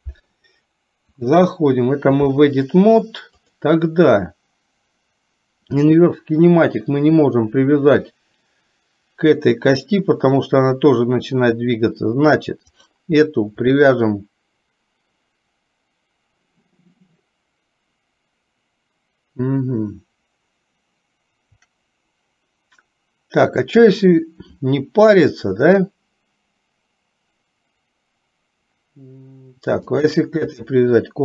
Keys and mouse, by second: 1.3 click, 3.4 click, 12.6 click, 29.9 shift+click.